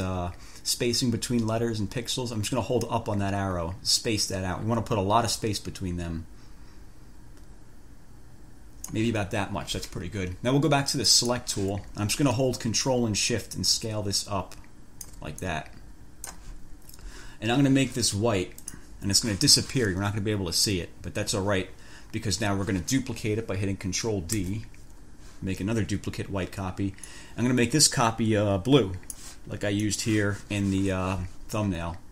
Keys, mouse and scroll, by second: 3.0-9.4 drag, 11.3 click, 13.8-15.5 ctrl+shift+drag, 15.7-16.8 ctrl+shift+drag, 18.8 click, 24.6 ctrl+d, 27.2 click, 27.4-29.4 scroll up 1, 29.4 click, 30.1-30.4 scroll up 1.